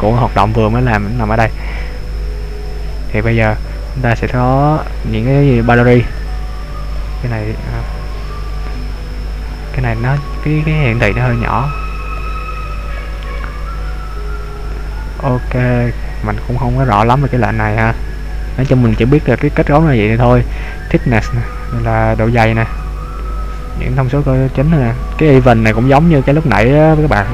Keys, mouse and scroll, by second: 1.9-2.8 scroll down 2, 2.9 scroll down 1, 3.1 scroll up 1, 3.2-3.7 scroll down 2, 3.7-5.0 scroll up 4, 5.0-6.1 scroll up 1, 6.1 click, 6.9 click, 8.0 click, 8.4 click, 9.7-10.9 scroll up 3, 10.9-11.5 scroll up 1, 12.4 click, 13.1 click, 14.6 scroll down 1, 15.7-17.3 scroll down 4, 17.3-18.7 scroll up 4, 18.7-19.1 scroll down 1, 19.5 scroll down 1, 20.2 scroll down 1, 21.2 click, 25.5-25.8 scroll up 2.